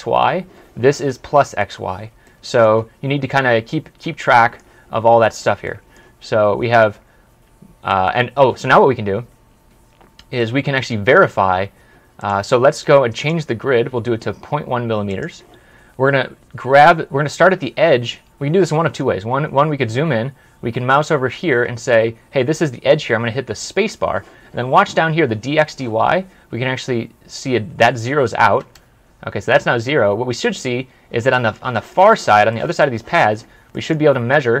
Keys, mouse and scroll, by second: 2.1 middle click, 3.4 scroll up 1, 4.2 scroll up 1, 4.4 middle click, 8.7 middle click, 9.1 scroll down 1, 9.2 scroll up 1, 9.9 scroll down 1, 10.4 middle click, 12.1 right click, 16.2-17.1 scroll down 1, 17.1 scroll up 1, 17.7 scroll down 1, 17.9-18.6 scroll up 1, 18.6-19.0 scroll up 1, 28.3 scroll up 1, 28.4 space, 29.5-30.4 scroll up 1, 30.4-30.9 scroll down 1, 31.2 middle click, 34.2-34.6 scroll up 1.